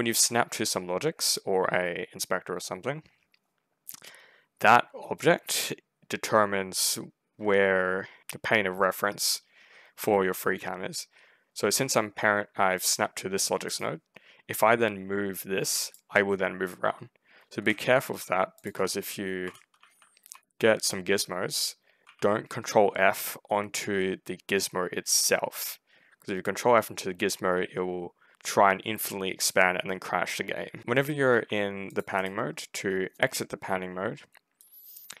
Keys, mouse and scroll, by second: 12.7 ctrl+click, 13.5 ctrl+right click, 13.8 ctrl+middle click, 13.8-14.2 ctrl+scroll down 2, 15.2 right click, 17.5 ctrl+a, 17.5 ctrl+z, 18.4 ctrl+click, 19.3-21.9 typing, 30.8 w, 31.8 ctrl+click, 32.0 ctrl+right click, 32.4 ctrl+middle click, 34.5 right click.